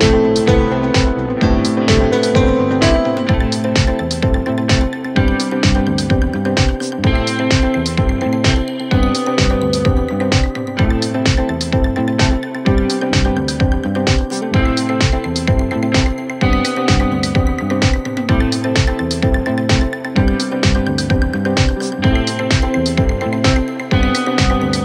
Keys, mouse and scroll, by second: 0.2 Right, 1.4 Left, 3.7 Up, 5.4 Down, 7.4 Right, 7.7 Right, 7.8 Right, 8.1 Right, 8.7 Right, 9.2 Right, 9.8 Right, 10.8 Right, 11.6 Left, 11.9 Left, 12.2 Left, 12.6 Left, 20.5 Return, 24.1 Up, 24.5 Up, 24.7 Left.